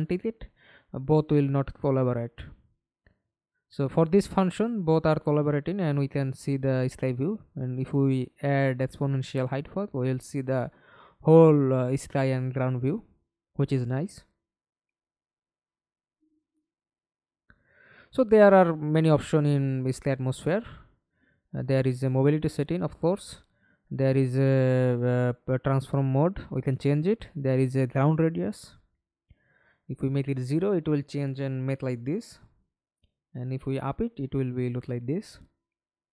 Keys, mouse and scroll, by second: 3.0-4.3 typing, 8.0-8.5 alt+scroll down 3, 8.5 alt+click, 9.9 alt+right click, 10.3 alt+click, 11.1 alt+middle click, 11.9 alt+scroll up 1, 15.2 BackSpace, 16.4-16.7 scroll up 1, 16.7-17.1 scroll down 1, 17.9-23.4 scroll up 48, 29.5 alt+click, 35.0-35.8 ctrl+l.